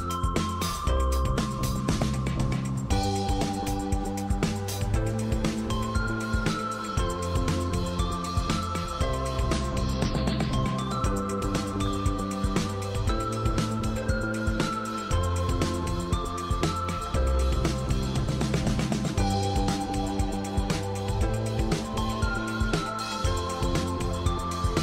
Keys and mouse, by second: 4.9-7.0 middle drag, 11.1 click, 11.7-12.5 drag, 13.2-16.5 drag, 18.2-19.0 drag, 22.4 click, 24.3-24.8 right drag.